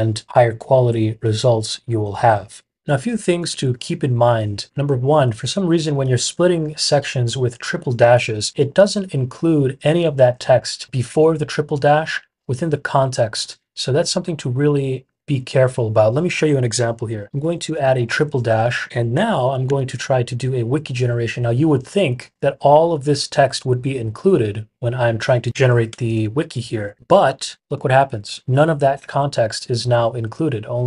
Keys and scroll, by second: 2.7 typing, 17.0-20.5 typing, 25.8-27.4 typing, 27.5 Return.